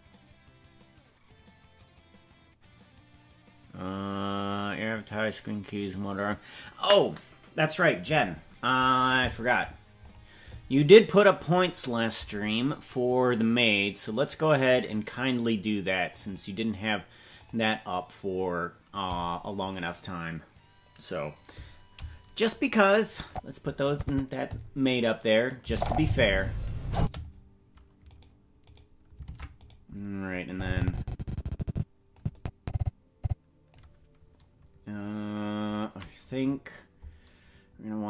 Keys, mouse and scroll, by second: 23.3 click, 23.9 click, 25.6 space, 27.0 space, 28.2 right click, 28.7 right click, 29.3 ctrl+Tab, 29.7 right click, 30.5-32.3 drag, 32.4-33.8 drag, 36.6-37.1 scroll down 2.